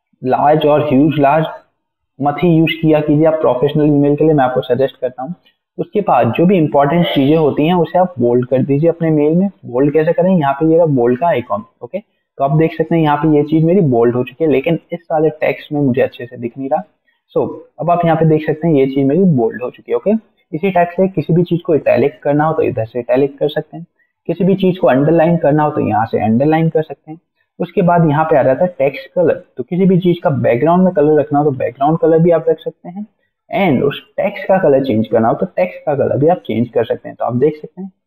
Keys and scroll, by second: 14.3 ctrl+a.